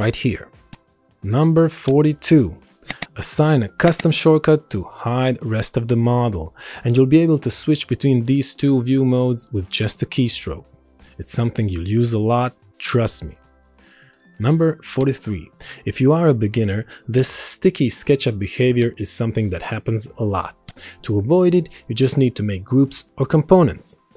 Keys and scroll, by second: 1.6 Escape, 3.2 Escape, 6.6 alt+shift+y, 9.5 alt+shift+y, 10.4 alt+shift+y, 11.9 alt+shift+y, 14.2 ctrl+End, 14.2 Delete.